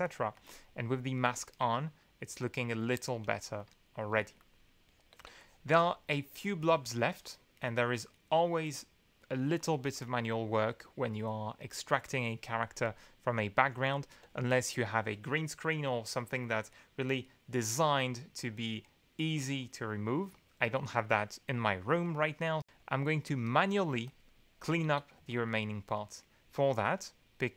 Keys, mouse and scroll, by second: 0.3 click, 1.5-3.2 drag, 3.4 click, 3.6 click, 4.1 space, 4.7 ctrl+click, 11.5 middle click, 11.7 click, 12.4 middle click, 12.6 click, 12.7 middle click, 12.8 click, 13.2 middle click, 13.3 click, 13.6 1, 14.2 2, 22.5 middle click, 23.4 middle click, 23.9 space, 24.0 ctrl+click, 24.3 ctrl+middle click, 24.4 ctrl+click, 25.1 ctrl+b.